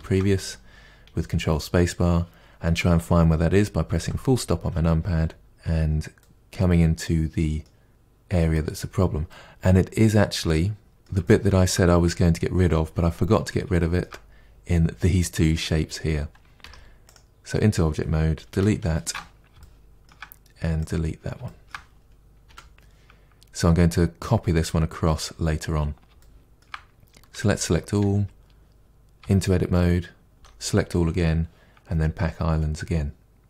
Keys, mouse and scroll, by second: 0.0 ctrl+space, 3.9 KP_Decimal, 5.0-6.3 scroll down 8, 5.4 middle click, 6.4-8.7 middle drag, 8.7-9.3 scroll down 1, 9.3 middle click, 10.0-10.8 scroll down 1, 10.8 scroll down 3, 10.9-14.2 shift+middle drag, 14.2-15.7 scroll down 2, 15.7-16.5 scroll up 5, 16.6 Tab, 17.1 click, 18.5 Delete, 19.6-20.8 shift+middle drag, 20.8 click, 21.4-22.5 shift+middle drag, 22.5 Delete, 26.2-27.3 shift+middle drag, 27.3 a.